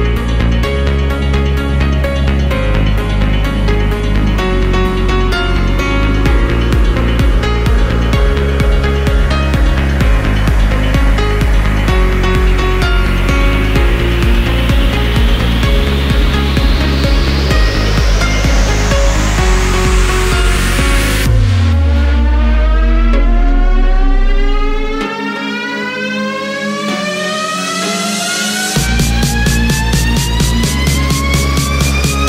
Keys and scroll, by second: 3.8 ctrl+z, 9.2 ctrl+v.